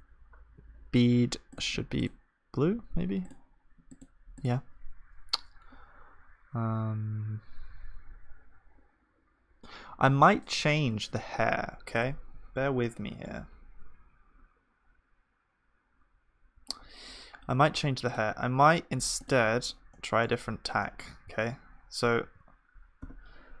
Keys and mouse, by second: 16.8-19.7 middle drag, 19.7-21.3 drag, 19.9-21.3 right drag, 21.3-23.6 middle drag, 21.3 shift+f, 22.2 shift+d.